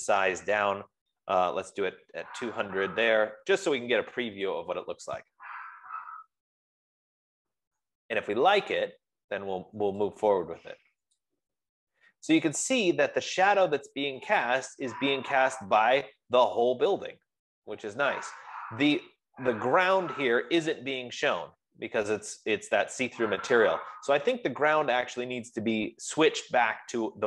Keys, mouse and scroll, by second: 0.3 click, 1.3-2.9 typing, 9.0 click, 9.9 click, 11.7-16.9 drag.